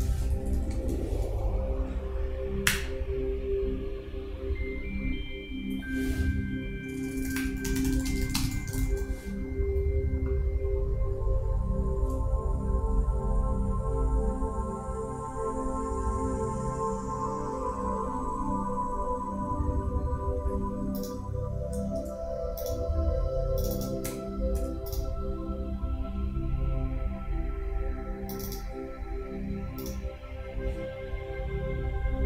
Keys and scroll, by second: 0.1 shift+., 0.3 shift+Down.